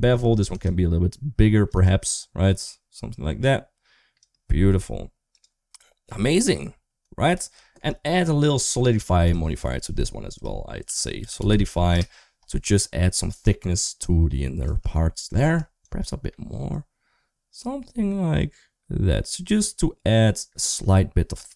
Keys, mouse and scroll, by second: 0.5 click, 1.7 shift+click, 5.2 click, 5.9-7.2 middle drag, 7.5 shift+middle drag, 8.4 click, 8.7 click, 9.1 click, 10.3-11.8 drag, 13.9 click, 14.9 shift+middle click, 15.7-20.5 shift+drag.